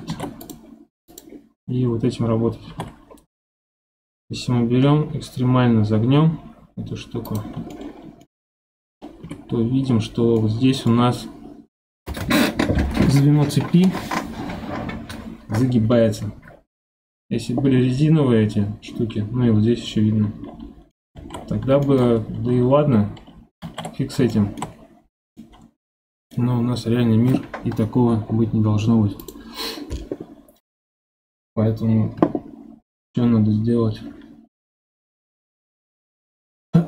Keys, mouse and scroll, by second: 0.1 ctrl+Tab, 1.1 click, 1.5-2.6 scroll down 2, 2.6 g, 7.7-8.6 shift+middle drag, 8.6-9.2 scroll up 2, 9.2 KP_1, 9.8-10.4 scroll up 11, 10.4-11.1 shift+middle drag, 11.1-14.2 scroll up 2, 16.4 scroll down 1, 20.4 scroll down 1, 20.9-21.3 middle drag, 21.3-21.8 scroll down 4, 21.8-23.6 shift+middle drag, 23.6 ctrl+z, 24.3-24.7 shift+middle drag, 24.7-25.4 scroll up 6, 25.4-28.4 middle drag, 29.2 click.